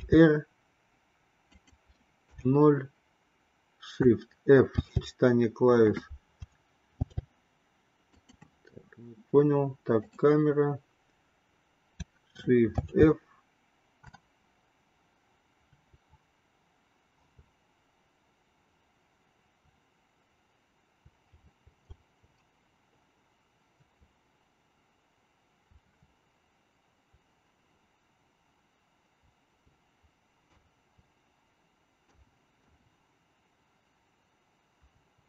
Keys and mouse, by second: 0.2 r, 2.6 KP_0, 4.8 shift+f, 7.1 shift+f, 13.0 shift+f.